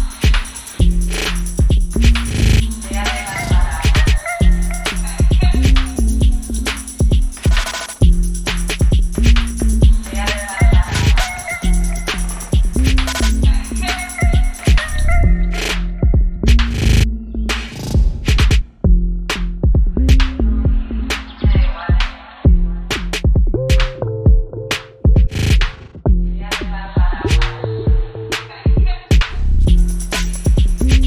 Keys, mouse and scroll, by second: 0.5 click, 3.7-11.3 drag, 11.4 click, 13.3 click, 14.0 ctrl+d, 15.7 click, 17.0 click, 19.3 click, 23.1 click, 27.0 click, 28.9 click, 30.2 click.